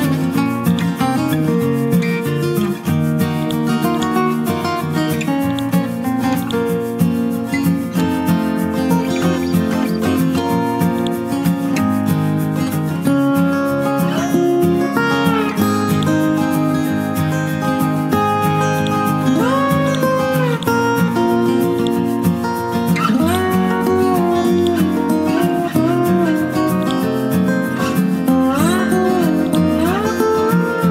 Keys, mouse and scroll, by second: 0.7-2.0 drag, 2.1-2.8 scroll down 1, 2.8-3.4 scroll up 1, 3.4 click, 3.9 shift+click, 4.8-5.5 scroll down 1, 5.5 click, 6.0-6.4 scroll up 1, 6.4 click, 6.9-8.6 scroll up 1, 8.6-8.9 scroll down 1, 11.0-13.8 drag, 13.8-14.3 scroll down 1, 14.7-15.9 scroll up 1, 15.9 click, 17.1 click, 17.3-18.0 scroll up 1, 18.0-18.8 scroll down 1, 18.8 click, 19.2-19.6 scroll up 1, 19.8 click, 20.5 shift+click, 22.7-23.2 scroll down 1, 23.7-24.6 scroll up 1, 24.6 click, 25.1-26.8 scroll down 1, 26.8-30.9 drag.